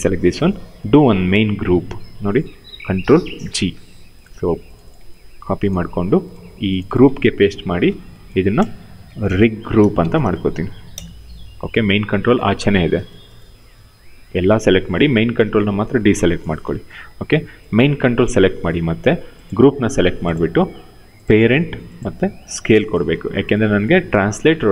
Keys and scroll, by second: 2.7 ctrl+g, 5.1 ctrl+c, 7.2 ctrl+v, 8.5-10.7 typing, 16.5 q.